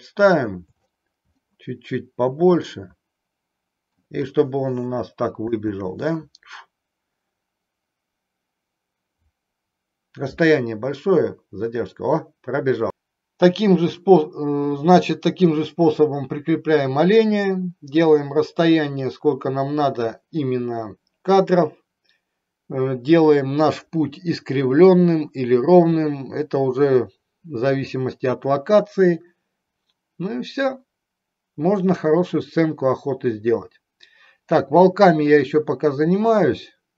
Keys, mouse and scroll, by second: 1.6-4.1 middle drag, 5.6 space.